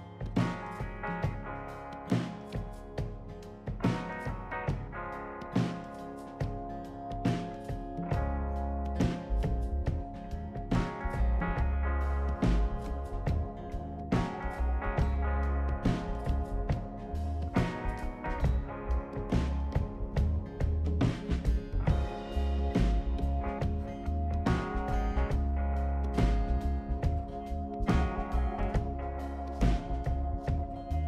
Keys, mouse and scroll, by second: 0.4 click, 3.6 click, 4.7 scroll down 1, 5.0-5.9 right drag, 9.0 click, 10.6-11.1 scroll down 4, 11.3 right click, 12.6 click, 13.7 click, 14.2 right click, 15.8 click, 16.9 ctrl+click, 18.3 ctrl+click, 22.1 click, 23.3-25.0 drag, 25.3 click, 26.1 click, 28.6 click, 30.6 scroll down 2.